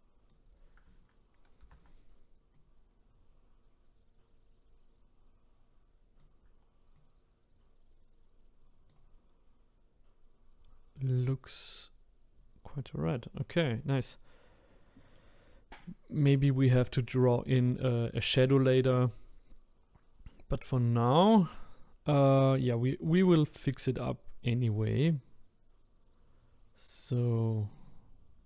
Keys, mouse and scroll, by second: 1.6 ctrl+z, 2.5-5.5 drag, 6.9-10.1 drag, 10.9-15.4 middle drag, 15.4-15.8 scroll up 1, 15.8-18.4 middle drag, 18.4-18.7 scroll down 1, 18.7-21.9 middle drag, 22.5-26.7 middle drag.